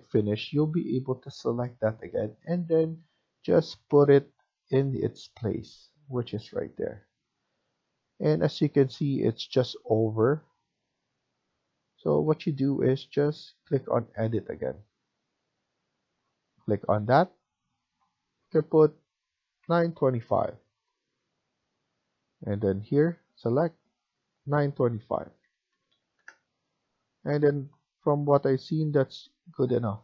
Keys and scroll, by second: 3.4 Up, 4.4 Up, 4.4 Left, 8.9 Up, 8.9 Left, 11.2 Escape, 11.5 Escape, 19.3-20.5 typing, 20.6 Return, 25.3-25.9 typing, 26.1 Return.